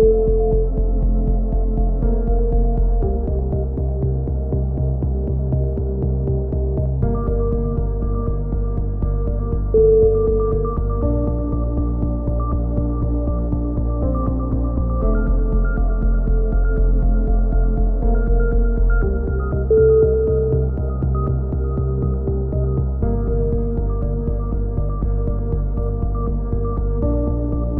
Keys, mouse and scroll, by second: 1.0 middle click, 1.3 click, 1.7 middle click, 2.4 Tab, 3.8 z, 5.0 click, 5.9-7.2 middle drag, 6.3 z, 7.7 l, 7.9 right click, 8.3 z, 9.7 x, 10.1 middle click, 10.2 z, 11.4-13.9 drag, 11.5 z, 12.1 z, 12.3 z, 12.7 z, 14.9 a, 15.2 Tab, 16.3 middle click, 17.2-18.6 middle drag, 19.3-21.2 drag, 21.3 click, 22.4 click, 23.0-25.1 middle drag, 23.7 Tab, 25.2 Tab, 25.7 middle click, 26.1-27.1 middle drag.